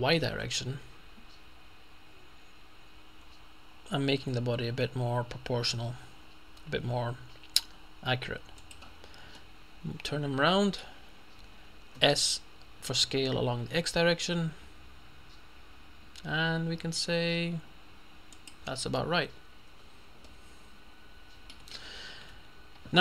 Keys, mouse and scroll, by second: 0.3 y, 8.7 click, 9.5-11.3 middle drag, 11.3-12.1 scroll up 1, 12.0 s, 13.7 x, 18.4 click, 19.0 middle click, 20.3-22.1 middle drag, 21.8 Tab, 22.4 Tab.